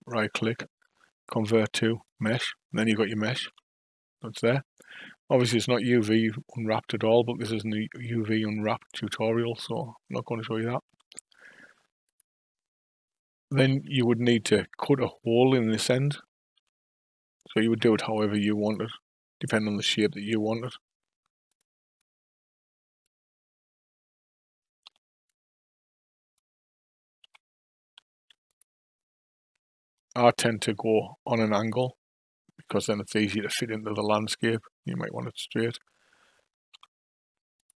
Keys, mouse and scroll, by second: 3.5 Tab, 10.9 Tab, 12.1 click, 13.6 KP_5, 13.7 KP_1, 16.6 Tab, 17.5 click, 21.5 click, 24.8 3, 25.3 click, 27.2 Delete, 33.6 KP_5, 36.7 Tab, 37.6 click.